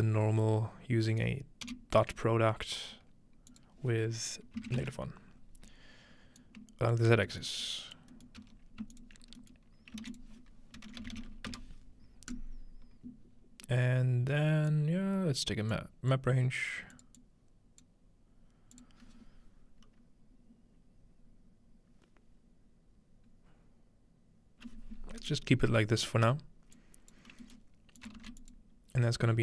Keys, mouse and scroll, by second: 0.0-2.3 drag, 1.7 typing, 3.5 click, 4.5-5.3 typing, 6.4 ctrl+click, 7.5 middle click, 7.6 click, 8.4 g, 8.8 click, 9.0-10.2 ctrl+drag, 9.2-10.9 scroll down 1, 10.0-12.0 typing, 10.3 click, 12.3 click, 14.7-15.5 drag, 15.7 click, 17.0 click, 17.2 click, 25.2 right click, 26.8 click, 27.3 scroll down 1, 28.1 shift+click, 28.2 shift+d, 28.5 click, 28.6-29.2 scroll down 1.